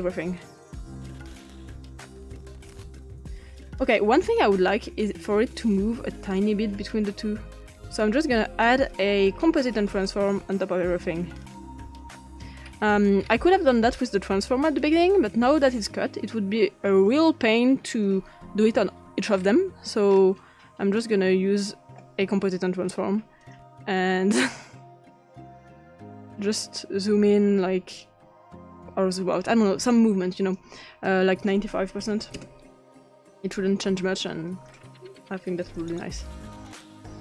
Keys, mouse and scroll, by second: 0.4 click, 3.4 click, 5.8-7.7 drag, 8.7 click, 11.6 click, 12.0-12.7 scroll down 2, 12.7-14.4 scroll up 2, 14.5-17.1 drag, 17.9 click, 19.4-20.1 scroll up 1, 20.1-20.8 scroll up 1, 20.8-21.3 scroll up 1, 21.0 click, 23.4 click, 25.4 click, 29.5-30.6 drag, 31.0 click, 32.0 typing, 32.1 click, 32.4 Return, 34.5 click, 35.6 click.